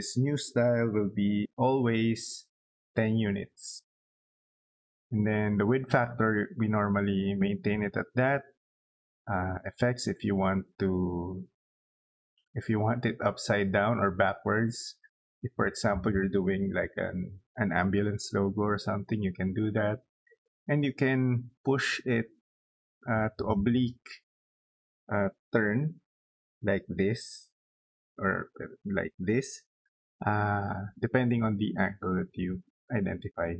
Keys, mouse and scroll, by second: 2.1 1, 5.0 click.